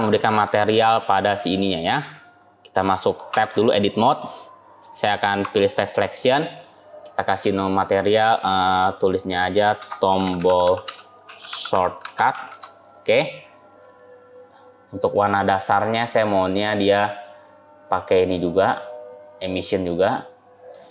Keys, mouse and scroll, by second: 0.7 scroll up 1, 1.3 click, 1.7 scroll down 1, 2.1-2.8 scroll up 4, 3.2 Tab, 3.9 click, 5.5 click, 5.5 3, 7.2 click, 14.4 click, 18.3 click.